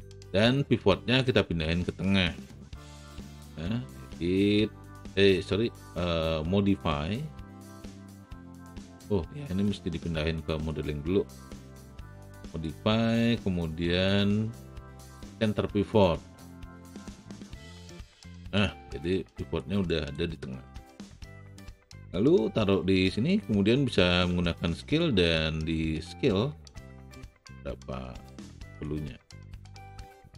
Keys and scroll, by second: 24.2 r.